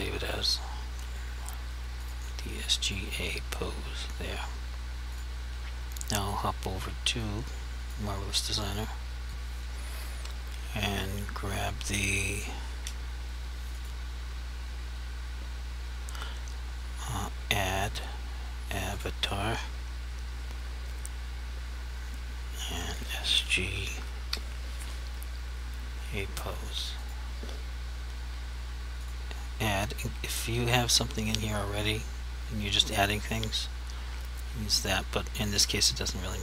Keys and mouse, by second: 9.3 click, 12.6 Home, 13.9 click, 19.0 click, 22.8 click, 23.8 s, 24.3 g, 26.9 click.